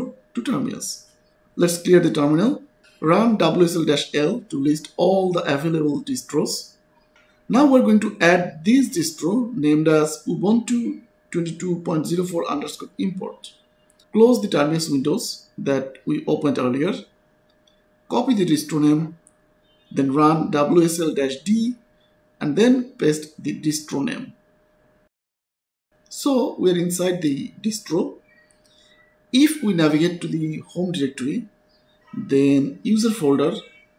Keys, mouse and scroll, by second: 1.2-4.3 typing, 2.3 Return, 4.8 Return, 11.5 click, 17.4 click, 18.5 click, 19.7 right click, 20.2 click, 20.5-21.7 typing, 23.5 d, 23.8 space, 24.8 right click, 25.3 Return, 28.0 click, 28.2-33.9 typing, 28.5 Return, 29.4 Return, 30.1 Return, 33.2 Return.